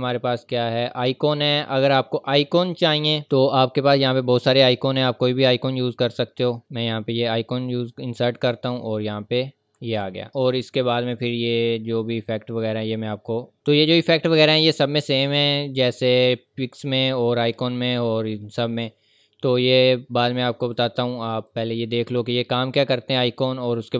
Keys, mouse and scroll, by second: 3.5 scroll down 1, 6.6 click, 20.7 click.